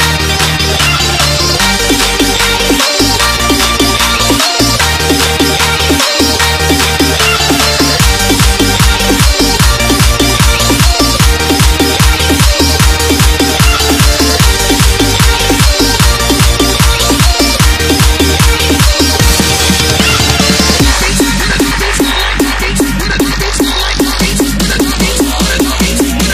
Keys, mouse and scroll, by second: 1.1 Return, 1.9 click, 7.8 Delete, 9.8 scroll up 1, 10.7 click, 22.9-23.4 scroll up 1, 23.4-23.9 scroll down 1, 23.9 click, 26.0-26.3 alt+scroll up 2.